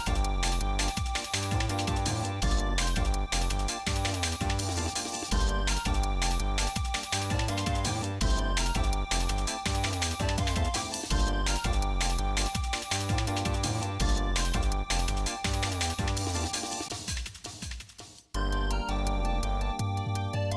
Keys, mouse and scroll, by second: 0.5 middle click, 1.1 click, 1.3 Tab, 1.8 middle click, 2.3 Tab, 2.8 click, 3.5 click, 4.4 shift+click, 5.9 ctrl+j, 7.4-8.5 right drag, 8.7 shift+middle click, 11.0 ctrl+s, 12.5-14.7 drag, 15.8-17.5 shift+middle drag, 17.8 middle click, 18.5 click, 20.0-20.5 drag.